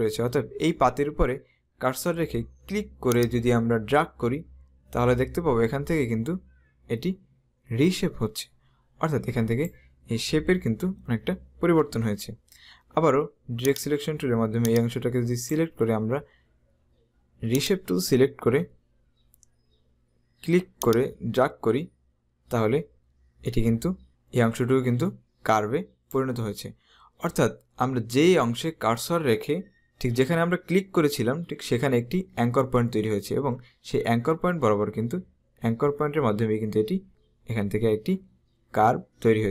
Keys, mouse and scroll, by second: 3.2 click, 13.9 click, 17.7 click, 20.9 click.